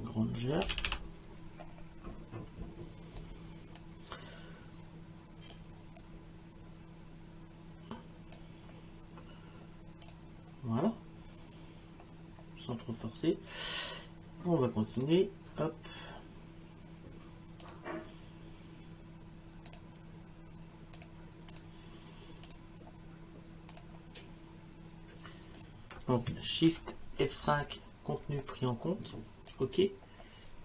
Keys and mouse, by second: 0.0-1.4 typing, 3.2 click, 5.6 click, 8.0 click, 10.0 click, 15.0 click, 17.6 click, 19.7 click, 21.0 click, 23.7 click, 25.6 click, 27.4 shift+F5, 29.5 click.